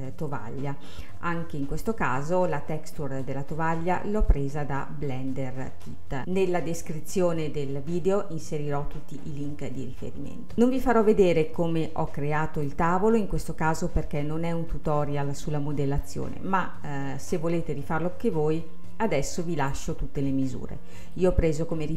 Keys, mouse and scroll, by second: 1.0-2.7 scroll up 2, 2.7-5.8 middle drag, 10.0-10.5 scroll down 1, 10.5-11.6 middle drag, 11.6-13.5 drag, 13.5-14.1 scroll up 1, 14.1-17.0 scroll up 1, 17.0 scroll up 1, 17.3 click, 19.1-20.3 drag, 20.3-21.9 middle drag.